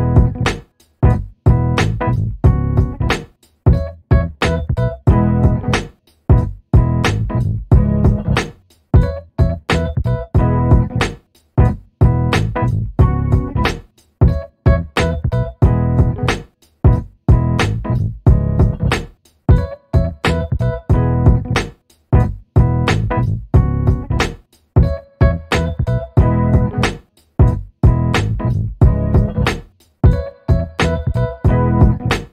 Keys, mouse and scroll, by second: 0.5 click, 1.5 click, 3.2-5.1 drag, 7.7 ctrl+d, 9.7 ctrl+d, 10.8 ctrl+click, 12.0 ctrl+click, 13.5 shift+click, 14.6 ctrl+KP_Subtract, 16.4 click, 17.4 shift+click, 18.1 click, 19.1 ctrl+d, 20.0 ctrl+d, 21.1-23.4 ctrl+drag, 23.8 shift+click, 25.1 ctrl+KP_Subtract, 27.3 ctrl+z, 27.9 ctrl+z, 28.9 ctrl+click, 29.7-30.6 ctrl+scroll up 6, 31.0-32.3 ctrl+drag.